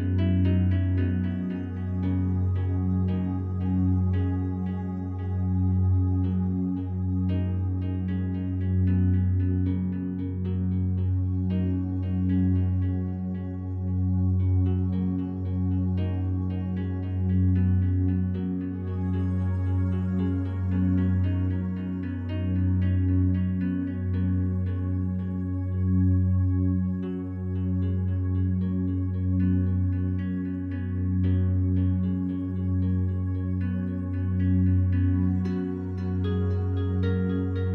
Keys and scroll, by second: 0.0-0.8 typing.